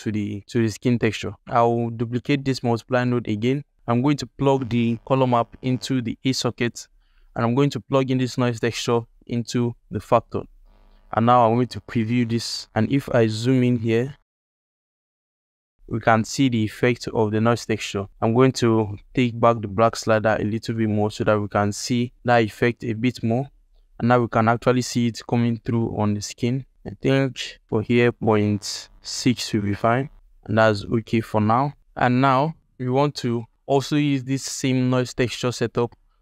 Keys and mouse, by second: 0.3 g, 1.8 click, 2.4 shift+d, 3.5 alt+shift+middle click, 4.5-6.4 drag, 6.9 alt+middle click, 8.0 alt+middle click, 8.7-10.1 drag, 10.3 alt+click, 11.8 ctrl+shift+click, 13.7 ctrl+alt+click, 19.7 click, 28.1-30.1 drag, 32.2 ctrl+alt+click, 36.0 alt+shift+drag.